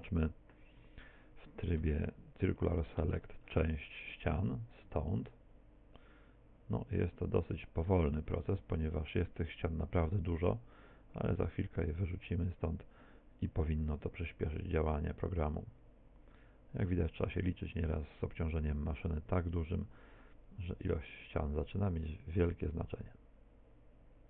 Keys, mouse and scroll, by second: 0.4 z.